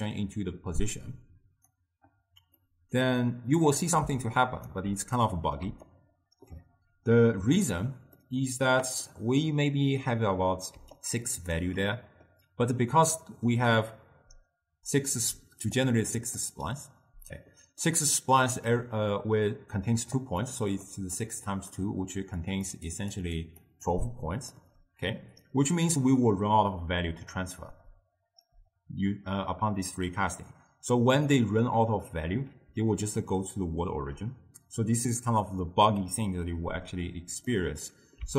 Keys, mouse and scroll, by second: 2.7-4.5 middle drag, 4.5 ctrl+alt+right click, 5.2-5.7 middle drag, 5.7 d, 6.0-7.7 right drag, 7.7 d, 8.0 d, 8.3-10.9 middle drag, 10.9 d, 11.1 click, 11.7 d, 11.8 d, 12.0-15.1 middle drag, 15.4 d, 15.9 d, 15.9 click, 16.5 d, 16.5 d, 17.9-18.8 middle drag, 18.8-24.8 typing, 20.3 click, 20.7 click, 21.3-21.8 drag, 22.6 click, 23.0 click, 23.5 click, 24.0-24.6 drag, 31.3-32.8 middle drag, 32.8 d, 33.2-34.0 drag, 34.0 d, 34.7 d, 37.6-38.3 middle drag.